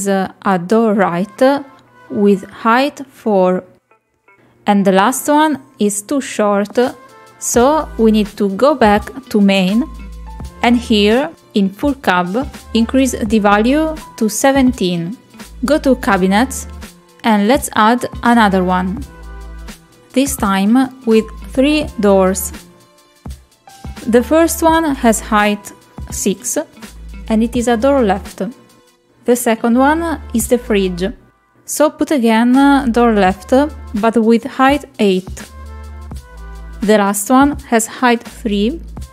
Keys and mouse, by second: 0.8 click, 4.5 click, 4.9 click, 15.7 click, 17.0 click, 20.2 click, 22.2 click, 25.8 click, 27.0 click, 28.4-30.0 drag, 32.0 click, 33.0 click, 35.7 click.